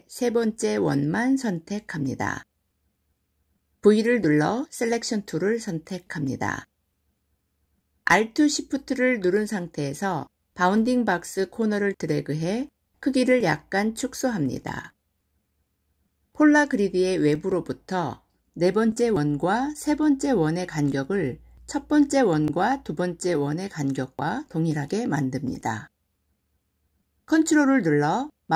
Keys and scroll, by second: 3.8 v.